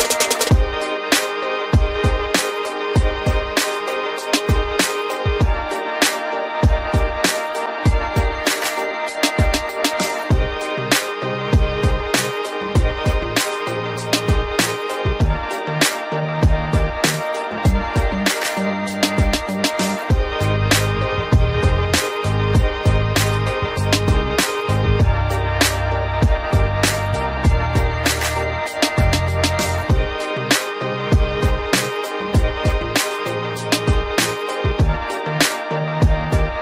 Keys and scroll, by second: 27.3 ctrl+alt+z.